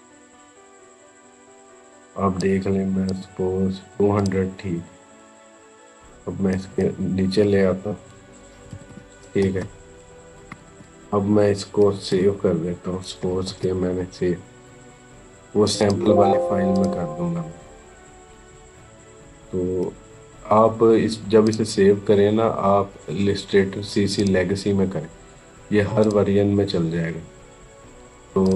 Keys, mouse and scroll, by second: 7.0-7.9 scroll up 1, 9.2 space, 10.2 ctrl+=, 13.3 ctrl+alt+s, 15.4 click, 21.3 click, 24.0 click, 28.2 click.